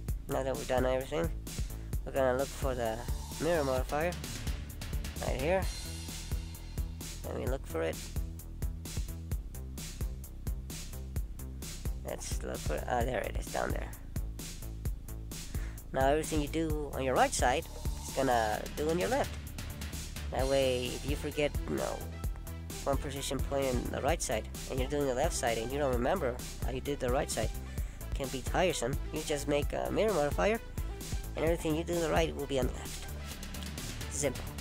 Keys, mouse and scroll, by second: 3.1 click, 4.0 click, 14.3 middle click, 20.1 middle click, 24.5 middle click.